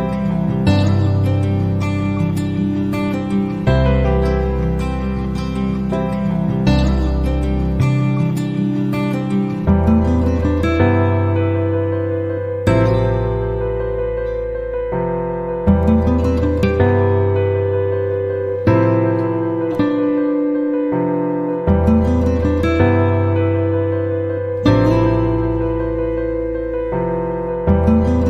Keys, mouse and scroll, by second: 5.4 click, 6.7 click, 8.0-10.2 right drag, 11.3 click, 12.2 click, 13.1 middle click, 13.6 click, 14.0 right click, 15.7 click, 17.4 click, 19.4 click, 19.9 middle click, 21.7 middle click, 22.5 click, 23.7 KP_2, 24.0 KP_0, 24.3 KP_Enter, 25.7 click, 27.1 click.